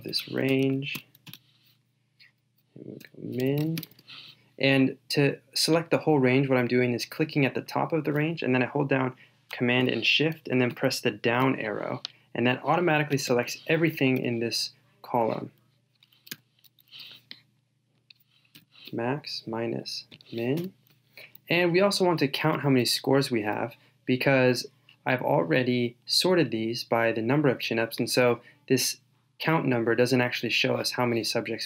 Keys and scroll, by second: 0.6 shift+super+Down, 10.7 shift+super+Down.